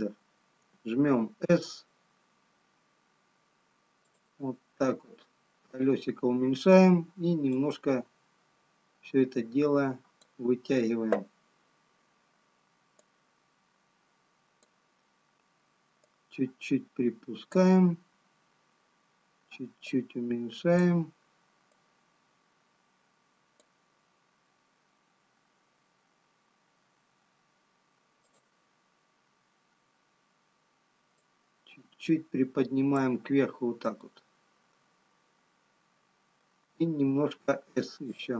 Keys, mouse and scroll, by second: 1.6 s, 4.8-5.6 scroll down 4, 10.4 click, 13.0 click, 16.3 click, 31.0-31.4 scroll up 8, 32.7 click, 33.7 scroll down 2, 35.8 middle click, 37.3 s.